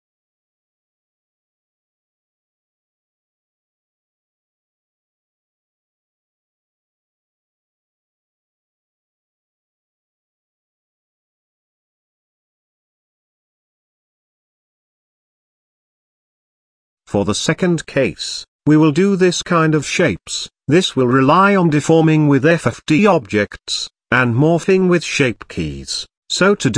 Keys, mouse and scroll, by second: 1.8 s, 2.4-4.4 middle drag, 4.9-5.4 shift+middle drag, 5.4-6.7 scroll up 1, 6.7-8.7 middle drag, 9.7-11.7 shift+middle drag, 12.3-14.3 middle drag.